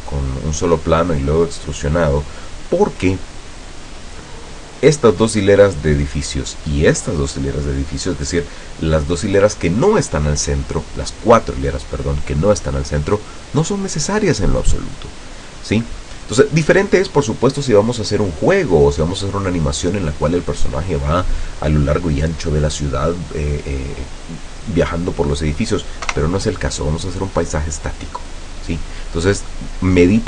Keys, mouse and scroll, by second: 26.1 KP_0.